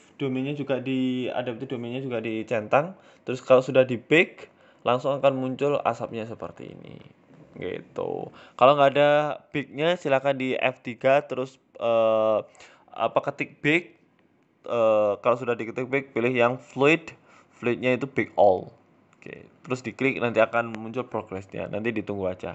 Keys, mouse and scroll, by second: 0.6-1.5 scroll down 2, 1.6 space, 7.6 Escape, 8.6 click, 9.6 click, 12.8 right click, 13.5 click, 16.7 click.